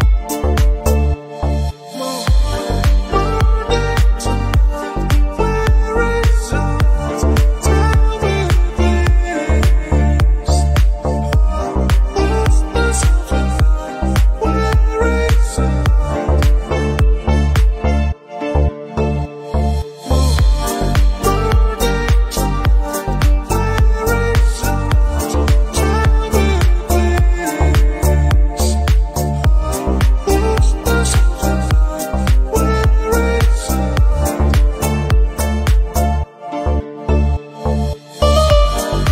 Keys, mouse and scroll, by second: 0.0 p, 0.2 middle click, 0.3 Tab, 0.6 click, 0.8 click, 1.0 shift+middle click, 1.1 click, 1.7 h, 1.8 click, 2.2 Tab, 2.2 a, 2.4 s, 3.7 KP_1, 3.8 scroll up 1, 4.0 e, 4.8 r, 5.2 scroll down 1, 5.3 Tab, 5.8 alt+h, 5.9 scroll down 1, 6.0-6.7 shift+middle drag, 6.8-7.1 scroll up 2, 7.1 Tab, 7.2 Tab, 7.3 click, 7.7-8.3 middle drag, 8.4 Tab, 8.6-11.0 typing, 10.3 scroll up 3, 11.5-12.9 scroll down 5, 11.7 Tab, 11.8 click, 12.0-12.4 middle drag, 12.5 shift+middle drag, 13.7 shift+middle drag, 14.0 scroll down 1, 14.0 middle click, 14.9-17.7 typing, 16.3 Tab, 18.3 shift+middle click, 18.4-18.9 scroll up 4, 18.5 shift+middle click, 18.7 shift+middle click, 19.0 click, 19.2 g, 20.0 click, 20.0 g, 20.6 click, 20.7 g, 21.3 Tab, 21.6 click, 22.3 scroll down 2, 22.5-23.7 drag, 23.7 Tab, 24.2 alt+s, 24.7 click, 25.1 click, 25.3 s, 25.9 alt+s, 27.0 click, 27.3 alt+s, 27.7 click, 28.0 alt+s, 28.4 Tab, 28.7 g, 29.2 g, 29.6 g, 30.1-30.7 middle drag, 30.7-31.3 scroll up 3, 31.0 middle drag, 31.3 click, 31.8 g, 32.3-32.9 drag, 32.9-33.4 middle drag, 33.4 scroll up 1, 33.4-33.9 scroll down 6, 33.9-34.2 shift+middle drag, 34.2 scroll down 1, 34.3-34.8 shift+middle drag, 34.8 scroll up 1, 34.9 shift+middle drag, 35.1 drag, 35.3 s, 35.9 right click, 36.3 s, 37.0 g, 37.4 click, 37.5-38.0 middle drag, 38.8 scroll down 2, 38.9-39.1 shift+middle drag.